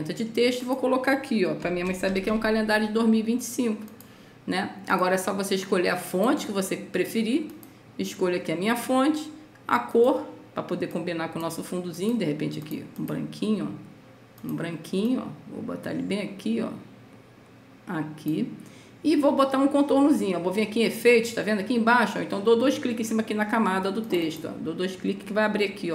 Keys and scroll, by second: 1.8 KP_0, 2.0 KP_2, 2.2 KP_5.